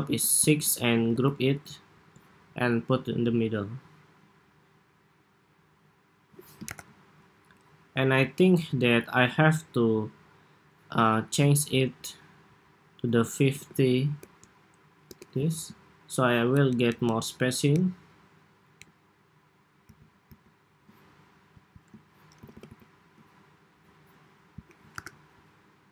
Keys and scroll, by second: 0.8 super+g, 6.4 super+=, 16.4 alt+Down, 16.7 alt+Down, 16.9 alt+Down, 17.6 alt+Down, 18.7 alt+Up, 19.6 alt+Right, 20.1 alt+Right, 22.1 alt+Left, 22.3 alt+Left, 22.4 alt+Left, 24.7 super+-.